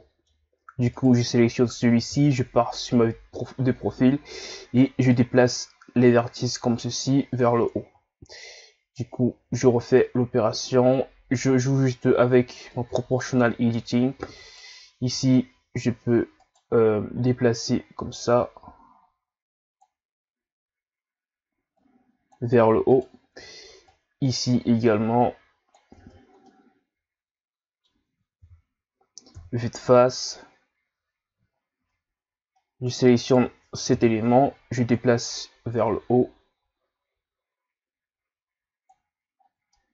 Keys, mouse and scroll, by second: 0.9 right click, 2.1 KP_3, 5.1 click, 7.6 ctrl+z, 8.9 right click, 17.2-17.5 scroll up 1, 18.2 click, 21.8 click, 22.9 right click, 23.8 click, 25.9 Tab, 26.4-28.4 middle drag, 28.4 KP_3, 29.3 KP_1, 31.5-31.8 scroll up 1, 31.8 Tab, 32.6 middle click, 33.2 right click, 33.9 KP_1, 35.2 click, 39.3 ctrl+scroll up 5, 39.7 middle click.